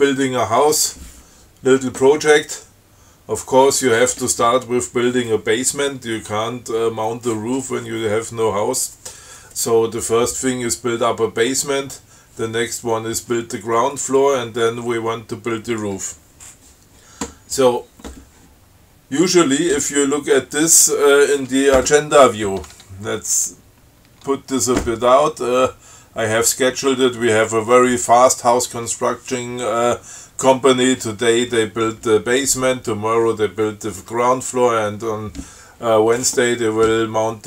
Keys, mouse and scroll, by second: 24.3 Tab.